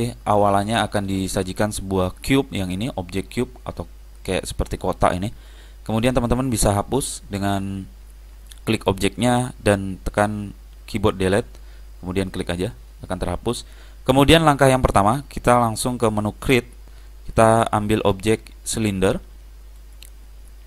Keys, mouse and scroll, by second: 8.6 click, 11.3 Delete, 17.5 click, 19.9 click.